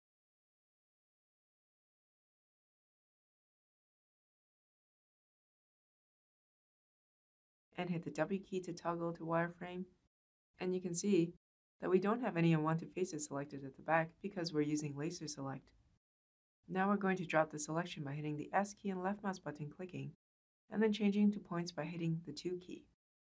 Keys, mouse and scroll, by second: 5.4-6.6 shift+drag, 7.4 w, 12.3 w, 17.9 s, 19.2 click, 21.5 2.